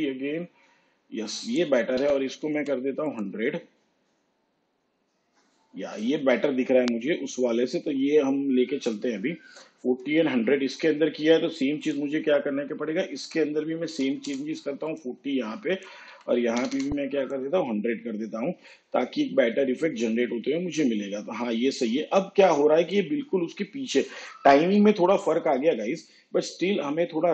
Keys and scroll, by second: 2.1 1, 2.5 0, 14.0 4, 14.4 0, 16.2 1, 16.7 0.